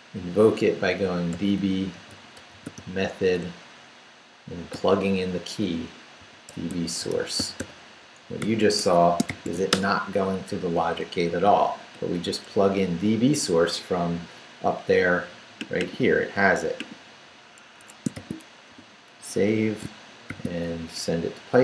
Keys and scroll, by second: 0.9-3.2 typing, 4.7 [, 5.9-10.0 typing, 8.8 Escape, 11.4 Up, 11.9 Left, 17.8 Escape, 18.1 shift+;, 18.7 shift+w, 19.3 w, 19.4 Return, 20.3 shift+;, 20.8 shift+Up.